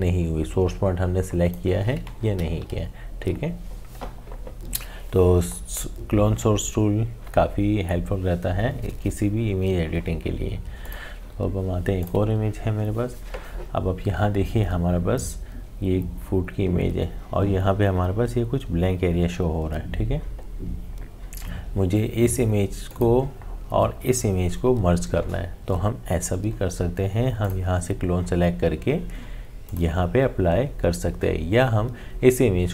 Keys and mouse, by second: 2.6 ctrl+z, 10.8 click, 22.9 click, 27.4 click, 29.7 click.